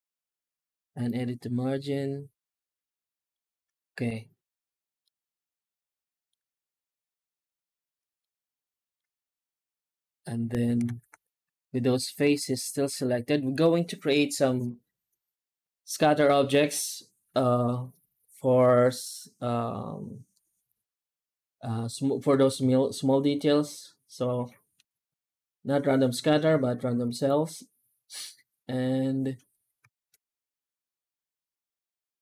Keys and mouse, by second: 4.9-6.1 middle drag, 8.1 shift+middle click, 8.5 shift+middle click, 9.7 right click, 10.1 Tab, 10.7 alt+shift+z, 11.3 Tab, 12.0 alt+shift+z, 23.2 shift+q.